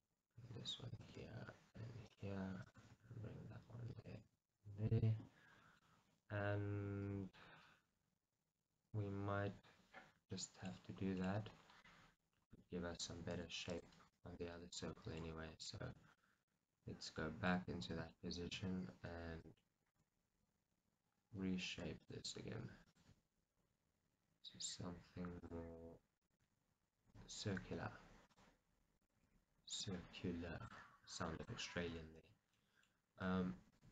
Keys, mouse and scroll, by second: 1.0 click, 1.2 g, 2.3 click, 2.9 g, 5.1 click, 5.6 scroll, 5.8-7.4 middle drag, 10.8 scroll, 11.2-14.2 middle drag, 11.6-11.9 scroll, 12.3 scroll, 12.6-13.4 scroll up 2, 14.3 right click, 14.7-15.0 scroll, 15.0 middle click, 15.4 scroll, 16.0-17.9 middle drag, 17.9-18.2 scroll, 19.5 click, 19.9 g, 22.3 click, 22.9 click, 23.1 g, 25.5 click, 26.3 click, 26.5 g, 29.0 click, 29.2 g, 29.9 click, 30.6 click, 30.8 g, 31.5 click, 32.1-32.7 scroll, 32.7-33.7 middle drag, 33.1-33.7 scroll, 33.7 alt+click.